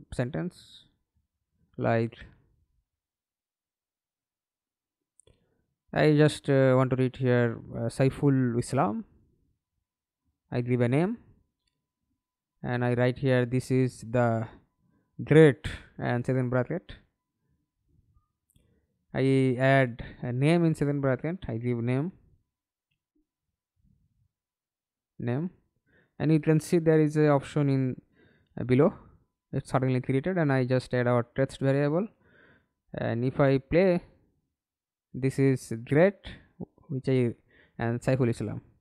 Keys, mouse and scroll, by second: 0.0-1.2 BackSpace, 6.2-8.9 typing, 11.8-16.1 typing, 22.8 alt+F9, 23.2 alt+F9, 24.9 right click, 24.9-26.1 typing, 32.2 middle click, 33.0 F11, 33.5 alt+p, 34.9-37.7 typing.